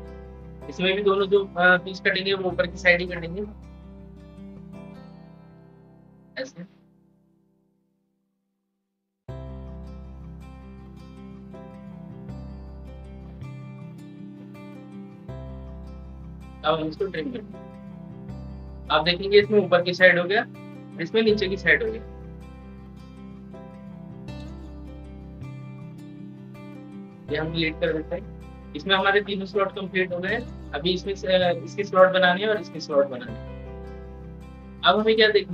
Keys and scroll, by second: 12.3 ctrl+z.